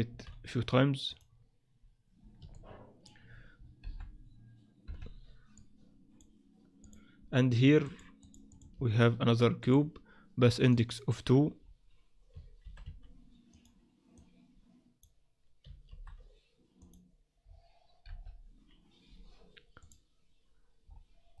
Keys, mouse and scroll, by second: 0.1 shift+d, 2.5 middle click, 3.5-4.9 scroll down 6, 3.8 KP_7, 4.9 KP_1, 5.5 click, 6.8 click, 8.2 click, 8.5 click, 8.7 shift+a, 10.6 click, 10.9 click, 11.6-12.3 scroll up 4, 12.6 shift+d, 14.1 click, 15.9 shift+d, 17.4-18.0 scroll down 1, 18.0-18.9 scroll down 2, 18.0 KP_7, 19.8 click, 20.9-21.4 scroll up 5.